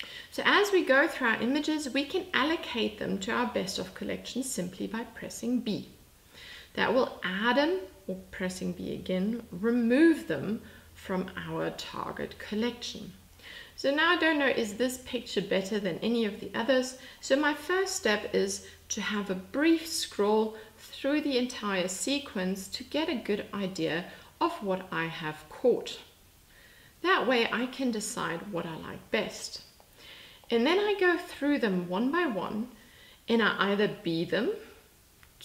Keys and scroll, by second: 5.2 b, 33.8 b.